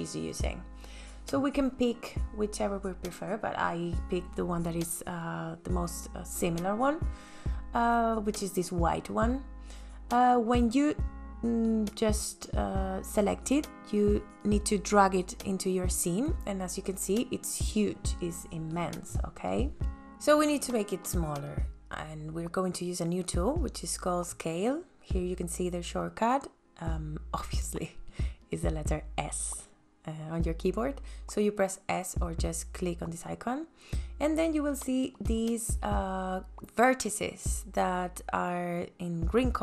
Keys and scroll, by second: 15.9 space, 32.0 s.